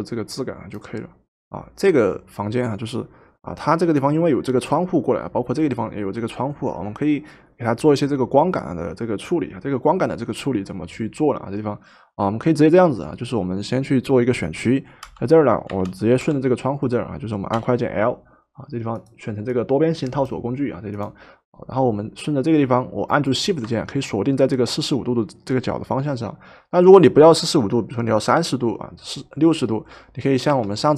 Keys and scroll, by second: 1.4 v, 15.0 l, 16.3 k, 17.6 l, 30.5 Escape.